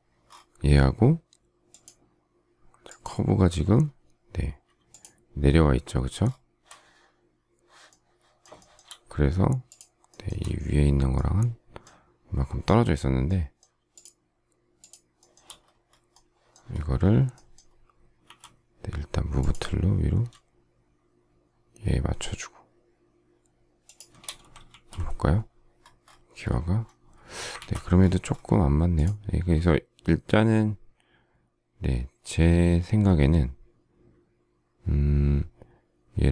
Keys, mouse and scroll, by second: 4.8 shift+click, 6.2-7.5 shift+scroll, 8.5 shift+middle click, 9.6 shift+click, 10.0 shift+middle click, 13.8 shift+click, 14.7 shift+click, 15.1 shift+middle click, 18.2 m, 23.8 shift+click, 24.6 alt+f, 27.5 ctrl+z.